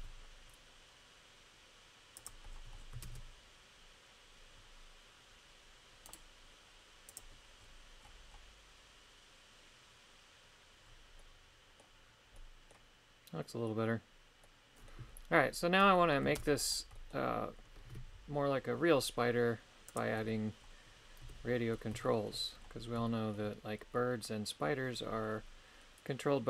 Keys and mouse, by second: 2.2 click, 3.1 shift+space, 6.1 right click, 7.1 click, 11.2 middle click, 12.4 middle click, 14.4 middle click, 16.0 middle click, 16.4 shift+space, 16.9 middle click, 19.9 click, 21.2 KP_3, 22.1 shift+middle click, 23.1 shift+middle click.